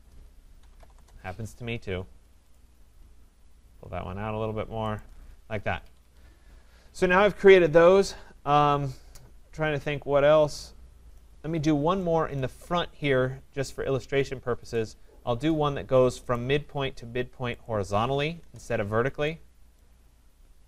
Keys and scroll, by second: 0.9 Return, 5.8 Escape, 18.4 Return.